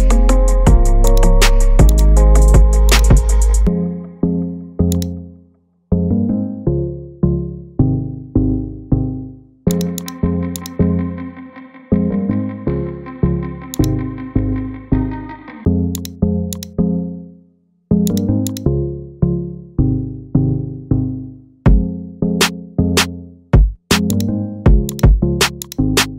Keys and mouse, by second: 1.1-2.3 drag, 14.9-15.4 middle drag, 17.2 shift+middle click, 18.5 shift+click, 21.6 g, 22.3 shift+middle click, 22.4-23.4 shift+drag, 25.6-26.0 shift+drag.